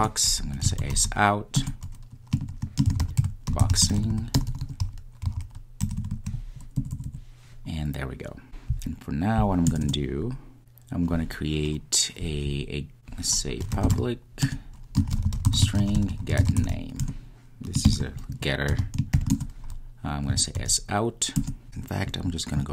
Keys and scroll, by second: 1.5 Return, 14.5 Return, 21.3 Return, 21.5 Return.